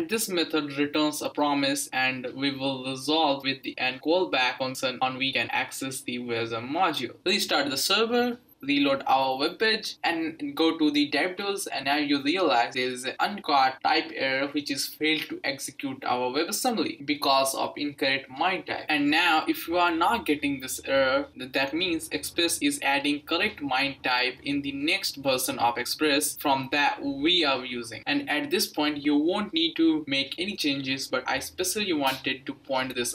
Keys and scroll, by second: 0.0-7.5 typing.